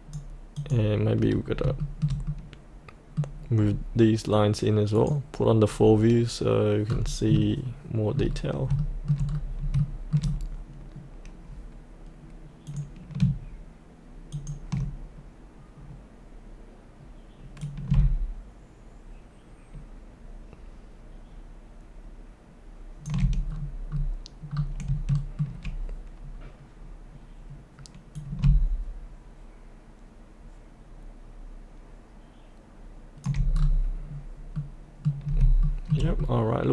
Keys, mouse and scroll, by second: 1.4 scroll up 1, 1.8 shift+middle click, 3.5 scroll down 1, 4.9 click, 6.8-8.1 scroll down 1, 8.8 shift+middle click, 9.2 scroll down 1, 9.8 shift+middle click, 10.2 scroll down 1, 12.7 click, 17.6-23.4 drag, 23.4-24.8 scroll down 1, 25.1 shift+middle click, 28.1-33.5 drag, 33.5-33.8 scroll up 1, 34.5 middle click, 35.2 scroll up 1, 35.6 shift+middle click, 36.2 middle click.